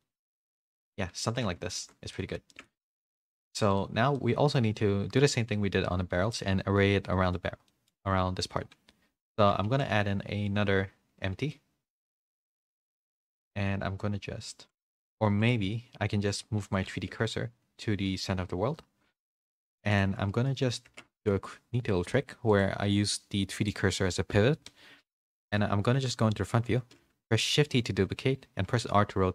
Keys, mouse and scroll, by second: 0.0-1.2 middle drag, 1.7 ctrl+z, 2.1 middle click, 2.5 shift+middle click, 3.0 click, 4.1 middle click, 6.1 middle click, 7.1 middle click, 7.6 middle click, 9.6 shift+a, 12.3 g, 15.2 x, 16.6 click, 16.9 shift+s, 19.9 click, 21.1 Tab, 21.1 a, 22.5-23.6 drag, 25.3 KP_1, 26.7 z, 27.5 shift+d.